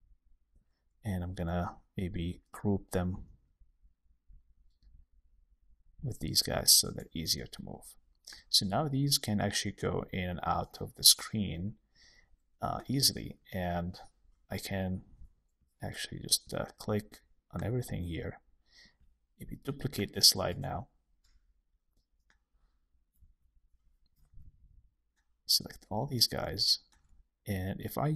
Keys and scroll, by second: 6.8 super+g, 13.1 super+1, 20.4 super+d, 23.2 super+z, 24.1 alt+super+l.